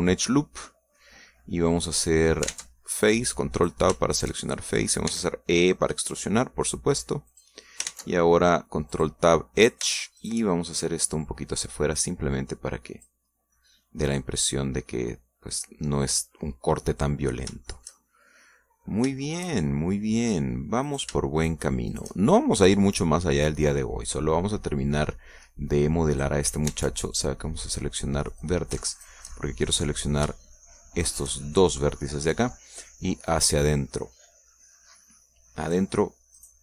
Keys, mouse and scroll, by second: 0.6 click, 1.0-2.2 middle drag, 2.3 scroll up 1, 2.7 middle click, 3.5 ctrl+Tab, 4.0 ctrl+click, 4.6 right click, 5.1 shift+right click, 5.4 shift+click, 6.1 e, 8.3 click, 8.9 ctrl+Tab, 9.9 click, 10.6 shift+right click, 11.2 shift+right click, 11.8-14.2 shift+drag, 14.3 scroll down 1, 14.6-17.1 middle drag, 17.3-17.7 scroll down 2, 17.9-19.7 middle drag, 19.9 scroll up 2, 20.2-21.3 shift+middle drag, 21.9 shift+right click, 22.4 shift+right click, 22.9 shift+right click, 23.1 shift+click, 24.5-27.4 drag, 27.7 ctrl+Tab, 29.3 click, 29.9 shift+right click, 30.3 shift+middle click, 32.0 shift+right click, 32.7 shift+middle click, 34.3-36.6 drag.